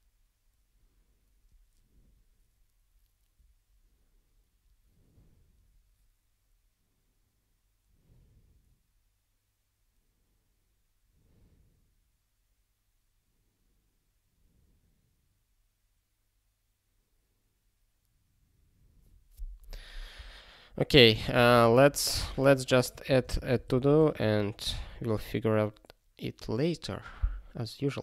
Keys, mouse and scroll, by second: 14.7-15.0 scroll up 1, 20.7 click, 21.2 ctrl+space, 21.3 ctrl+a, 21.6 alt+;, 22.1 Return, 22.4 Tab, 22.7-24.2 typing.